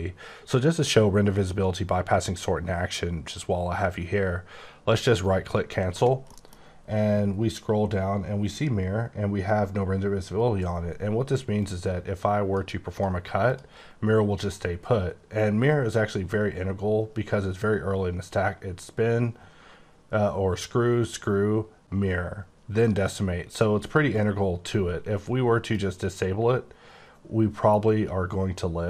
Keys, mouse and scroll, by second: 5.1 right click, 5.8-6.2 scroll down 2, 6.2 middle click, 7.3-9.6 scroll down 9, 11.6 click, 12.9 click, 13.4 click, 16.1-16.6 scroll up 7, 17.1-19.1 scroll up 7, 21.0-22.2 scroll down 10, 22.2-23.5 scroll down 1, 25.6 click.